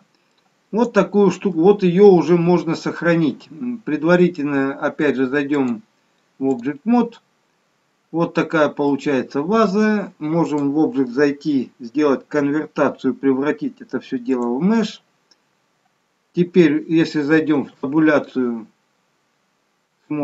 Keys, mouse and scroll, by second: 5.6 click, 8.8 middle click, 10.5 click, 17.6 Tab.